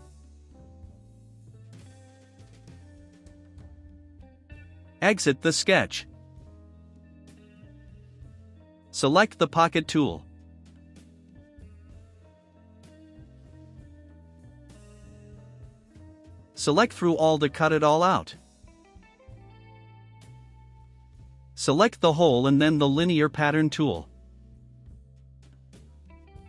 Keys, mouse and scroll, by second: 1.3 click, 2.1 1, 2.3 1, 3.0 0, 3.5 Return, 6.9 click, 8.1-9.1 drag, 9.4 click, 10.3 scroll up 2, 10.6 right click, 14.8 click, 16.5 click, 17.2 click, 19.0 click, 20.3 right click, 22.5 click, 26.3 click.